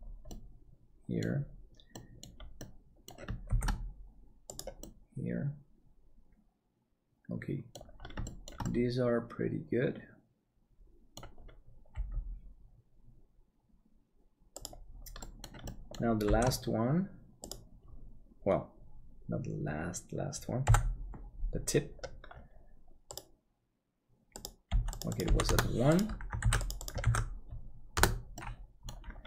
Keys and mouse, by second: 0.4 middle click, 2.0 middle click, 2.7 middle click, 3.5 shift+d, 4.9-7.7 middle drag, 8.2 shift+middle click, 8.7-11.2 middle drag, 11.9 g, 15.2 middle click, 15.7 shift+middle click, 16.2 shift+d, 20.6 n, 26.4-28.3 ctrl+drag, 28.3 middle click.